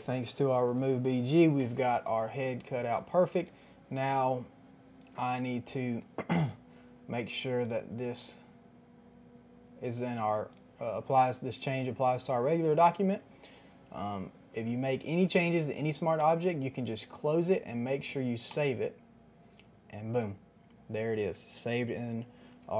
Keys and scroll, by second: 22.6 ctrl+t.